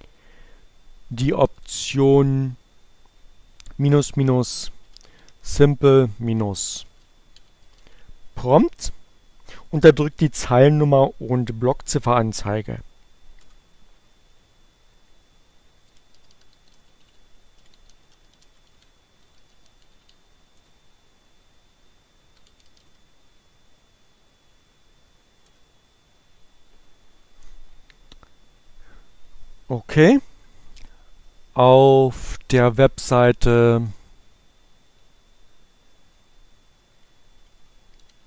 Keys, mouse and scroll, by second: 3.8-5.3 typing, 6.3-7.6 typing, 11.9 Return, 14.3-19.5 typing, 19.7 shift+Return, 21.7-22.8 typing, 24.6 Return.